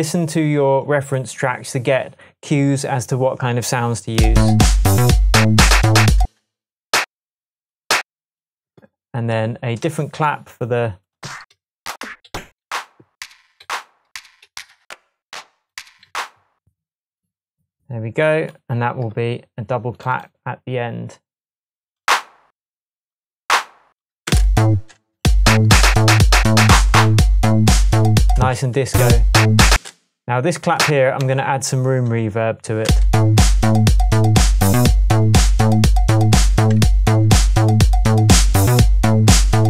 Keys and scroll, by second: 6.2 space, 7.0 alt+space, 9.9 Tab, 11.5 Up, 12.6 Up, 13.6 Down, 14.1 Up, 14.8 Up, 16.1 Down, 24.3 space, 28.4 space, 29.7 space, 31.3 shift+Tab, 33.9 space, 36.8 super+z.